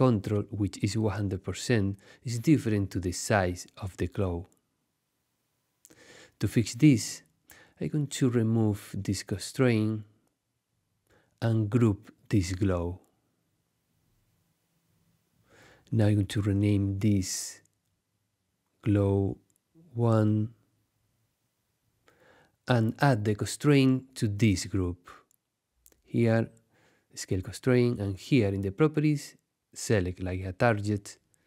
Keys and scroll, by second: 13.0 super+g, 17.3-19.5 typing, 20.2 Return.